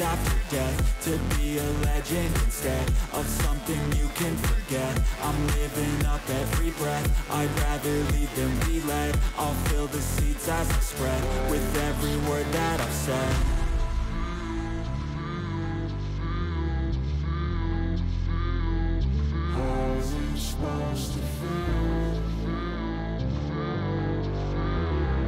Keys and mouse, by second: 0.3-2.4 drag, 2.6 click, 3.8-5.1 drag, 6.2 click, 6.8-7.8 drag, 8.7 click, 9.3 click, 12.3 alt+shift+click, 12.9 click, 14.1 alt+shift+click, 15.6 click, 16.1-17.7 drag, 20.1-21.5 drag, 23.7 alt+click, 24.5 alt+shift+click, 24.9 alt+shift+click.